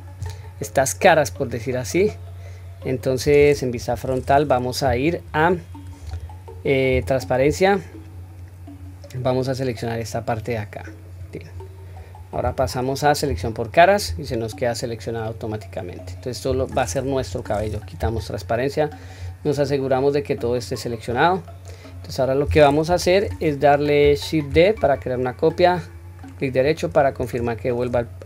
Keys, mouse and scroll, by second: 2.0-3.2 middle drag, 3.7 KP_1, 6.0 1, 6.9 q, 8.7-11.2 drag, 15.2-16.7 middle drag, 17.2 KP_1, 18.0 q, 18.4-19.0 middle drag, 19.2-19.9 scroll down 2, 19.7-21.6 middle drag, 22.1 middle click, 22.9 KP_1, 23.2-24.0 scroll up 1, 24.0-24.5 scroll up 1, 24.5 shift+d.